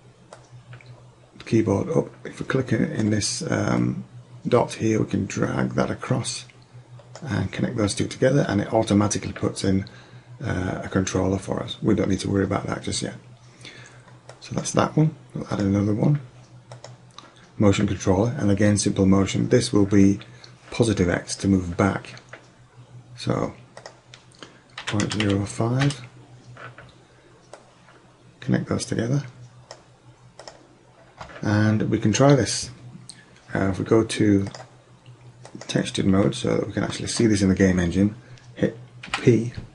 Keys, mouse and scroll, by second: 0.4-2.4 drag, 3.9-5.8 drag, 14.3-17.3 drag, 23.8-25.7 drag, 27.6-29.4 drag, 30.5-32.4 drag, 35.7-36.0 drag, 39.1 p.